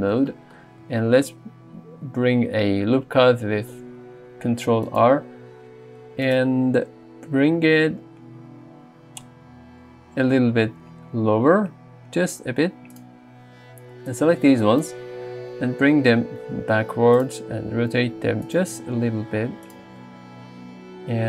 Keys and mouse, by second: 3.3 ctrl+r, 4.9 click, 10.5 g, 10.7 z, 13.0 click, 15.9 g, 17.2 click, 17.7 r, 18.5 click, 19.1 r, 19.7 click.